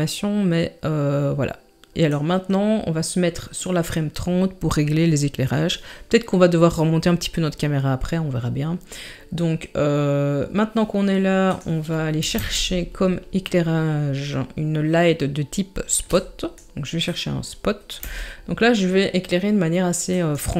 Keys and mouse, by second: 12.4 shift+a, 18.0 g.